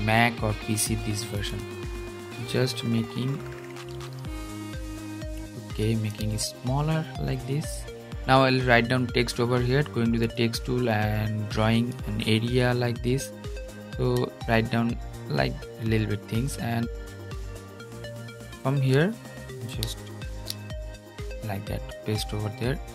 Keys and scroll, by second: 20.0 super+v.